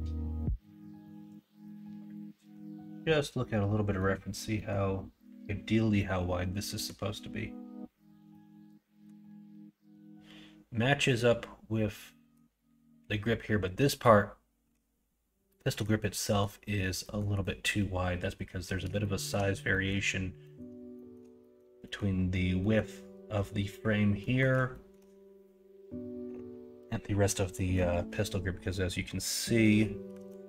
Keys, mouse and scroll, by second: 5.9-6.8 middle drag, 8.3 middle click, 12.1 middle drag, 15.5 middle drag, 16.1 middle drag, 17.0 middle drag, 17.4 middle drag, 19.0 shift+middle drag, 19.7 middle drag, 20.4 middle click, 20.9 shift+middle drag, 21.4 middle drag, 21.8 middle click, 22.6 middle drag, 24.2 middle drag, 24.7 shift+middle drag, 27.3-27.7 middle drag, 30.2 alt+z.